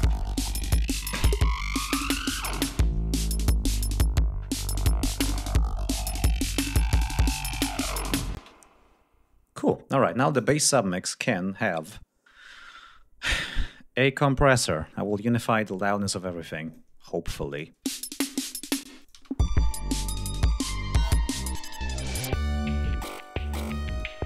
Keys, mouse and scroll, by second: 8.3 space, 10.3 click, 11.7 right click, 14.5 click, 15.7 ctrl+scroll down 2, 16.5 ctrl+click, 17.5 ctrl+click, 17.8 space, 18.4 ctrl+scroll down 2, 18.8 space, 19.0 ctrl+click, 19.7 ctrl+scroll down 2, 21.4 click, 22.8-24.2 drag.